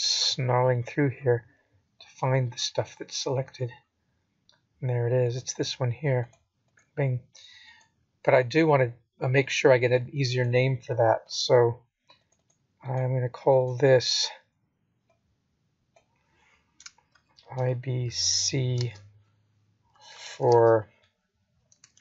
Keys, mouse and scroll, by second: 1.4-3.5 scroll up 22, 3.8 click, 13.9 click, 14.7 click, 15.7 click, 16.3 click, 17.4-20.1 scroll down 58, 20.1 scroll up 7, 20.6-21.7 scroll down 6.